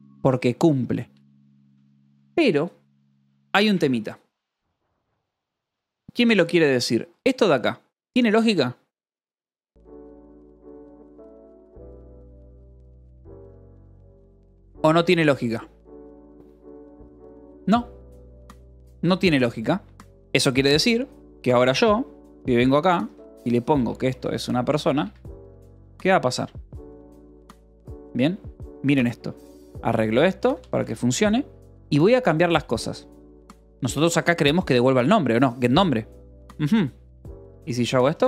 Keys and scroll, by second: 0.1 j, 0.7 j, 0.9 Escape, 1.8 ctrl+s, 4.5-7.9 typing, 20.2 Escape, 20.6-27.4 typing, 25.5 Escape, 26.6 Escape, 28.7 h, 30.1 l, 30.4 r, 30.7 Escape, 31.3 l, 32.5 k, 32.9 h, 34.0 l, 35.9-38.2 typing.